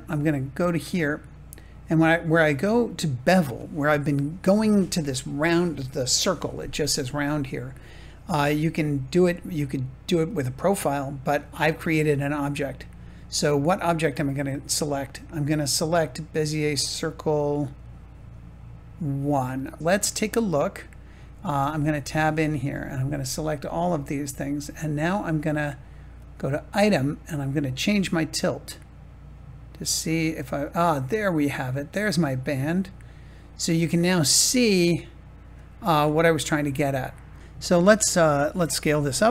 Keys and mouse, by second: 10.2 click, 14.7-19.8 drag, 21.6 Tab, 22.6 a, 27.9-35.4 drag, 36.2-37.4 middle drag, 38.9 s.